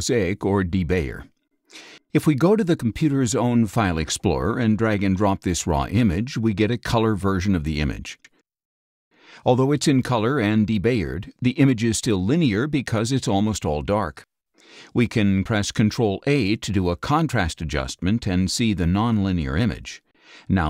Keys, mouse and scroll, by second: 0.1 click, 1.1 click, 3.1 click, 3.7-5.0 drag, 7.0 click, 8.7-9.3 scroll down 6, 8.9 middle click, 9.4 space, 9.5 click, 10.4 scroll down 2, 10.7 middle click, 10.8-11.7 scroll up 8, 11.3 middle click, 12.7-13.9 drag, 16.3 ctrl+a.